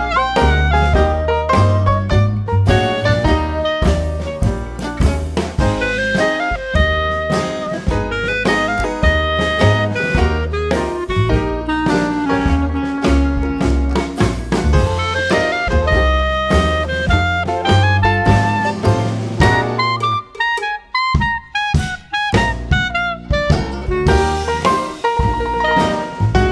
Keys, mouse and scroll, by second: 2.1 click, 3.4-5.4 drag, 6.9 shift+click, 8.2-9.8 drag, 10.1-12.0 drag, 13.6 click, 15.0-17.4 drag, 18.3 click, 20.7 click, 23.6 click.